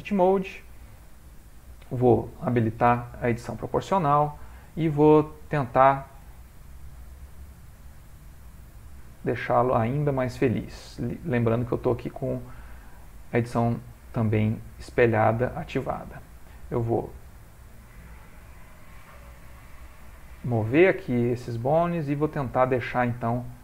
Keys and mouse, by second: 1.3 ctrl+middle click, 2.9 o, 4.2 click, 4.9 g, 12.6-12.9 ctrl+middle click, 12.7 ctrl+middle click, 13.7 click, 14.6 g, 16.1 click, 16.4 g, 20.0 click, 20.6 g, 22.9 click, 23.1 g.